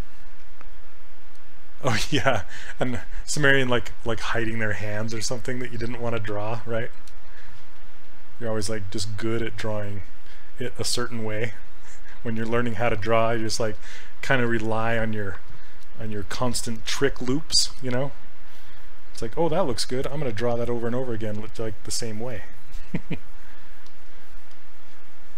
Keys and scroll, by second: 19.9 s.